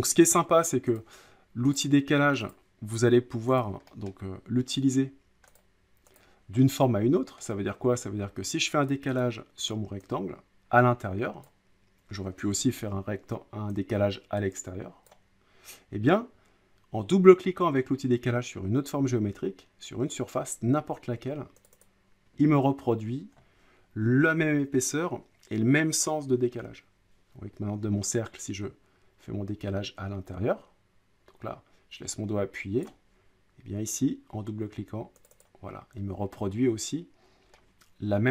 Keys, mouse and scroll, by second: 1.0 click, 1.7 click, 2.5 click, 4.1 middle click, 4.9 scroll up 5, 5.2-5.6 scroll down 5, 5.6 click, 6.2 click, 6.8 middle click, 7.5 scroll down 4, 7.7 scroll up 1, 7.9 middle click, 9.2 click, 11.4 click, 12.6 ctrl+z, 15.0 click, 21.7 click, 21.8 click, 32.8 click, 35.3 click, 35.4 click, 37.5 middle click.